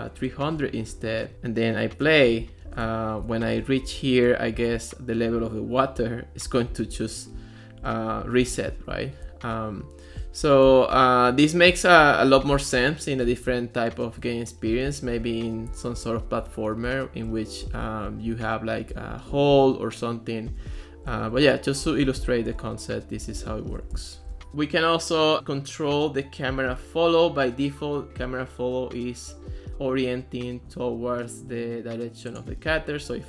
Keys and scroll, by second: 24.5 space, 32.8-33.2 typing.